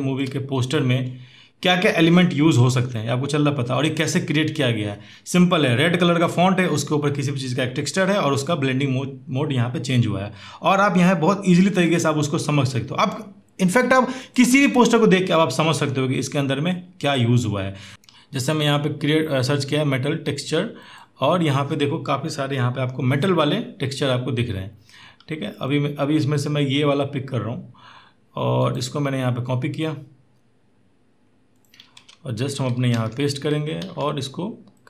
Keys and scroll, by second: 31.7 alt+Tab, 32.7 ctrl+v, 33.6 ctrl+t.